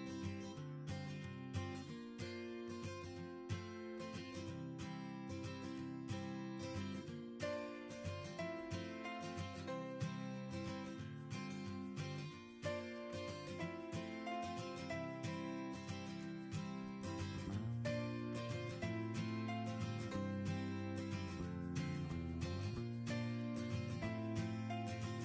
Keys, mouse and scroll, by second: 21.0 ctrl+s.